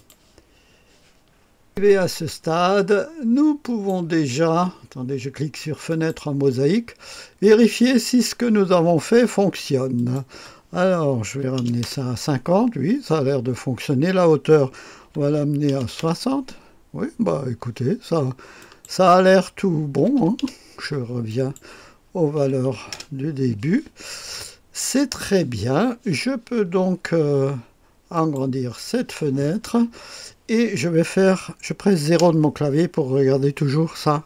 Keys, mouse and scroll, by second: 0.0 click, 1.7 click, 3.6 click, 5.9 click, 10.0 click, 11.3 KP_5, 11.6 KP_0, 11.8 Return, 15.0 KP_6, 15.7 KP_0, 16.0 Return, 18.6 click, 20.0 KP_1, 20.2 KP_5, 20.6 KP_0, 21.3 click, 22.4 KP_7, 22.6 KP_5, 22.9 Return, 28.1 click, 32.1 KP_0.